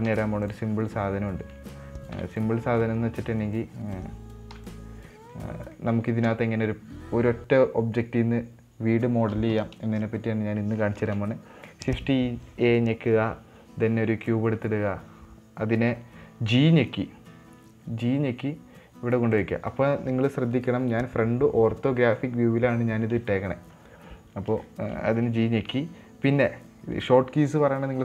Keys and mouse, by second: 0.4 x, 1.7 Tab, 2.5 x, 3.2 middle click, 3.8 click, 4.9 x, 5.5 middle click, 6.1 middle click, 6.6 KP_1, 11.3 shift+a, 25.0-25.3 shift+middle drag.